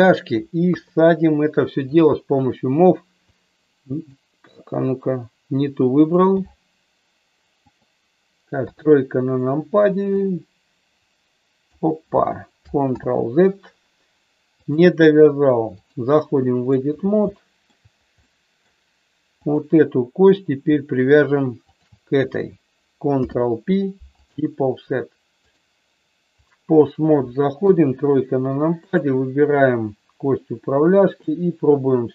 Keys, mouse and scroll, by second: 0.6 KP_3, 1.8 click, 3.3 click, 4.5 middle click, 7.6-9.1 drag, 9.1 KP_3, 10.2-11.7 drag, 13.0 ctrl+z, 14.7-16.0 drag, 16.2 middle click, 17.3 shift+middle click, 18.2 middle click, 19.4 click, 21.7 shift+click, 23.2 ctrl+p, 25.4-26.6 drag, 27.6 KP_3, 31.3-32.1 drag.